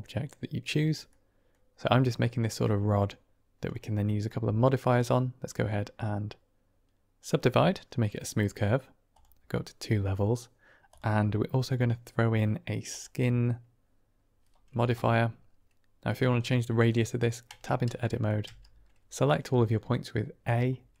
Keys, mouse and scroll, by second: 1.0-1.4 drag, 4.8-7.1 drag, 10.8-12.9 drag, 16.3 middle drag, 16.6 click, 17.4 Tab, 18.3 a.